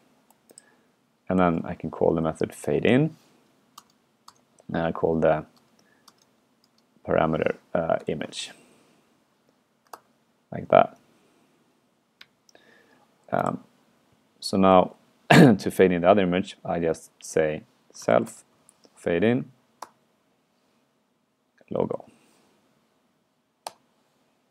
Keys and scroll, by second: 9.9 ctrl+Return, 14.8 super+Right, 17.3 alt+8.